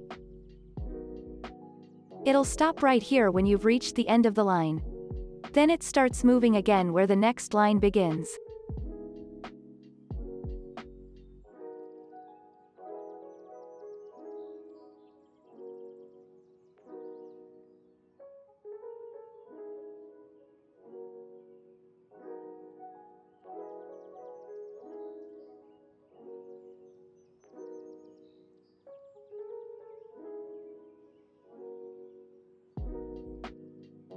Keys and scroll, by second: 18.5 ctrl+c, 27.7 ctrl+v, 31.1 z, 32.6 ctrl+v.